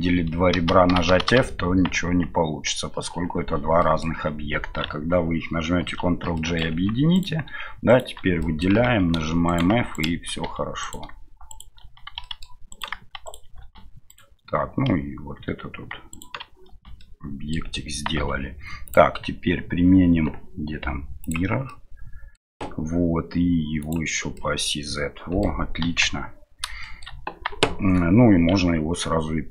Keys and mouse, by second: 2.1 Tab, 3.8 middle drag, 5.8 ctrl+j, 6.3 middle click, 6.7 Tab, 7.1 right click, 7.9 shift+right click, 8.4 middle click, 8.7 f, 12.2 middle click, 12.7 right click, 13.2 right click, 14.1 right click, 17.0 middle click, 18.1 Tab, 19.0-21.3 drag, 21.7-22.4 middle drag, 23.8 click, 24.3-25.4 middle drag, 25.8 KP_1, 26.8 shift+middle click.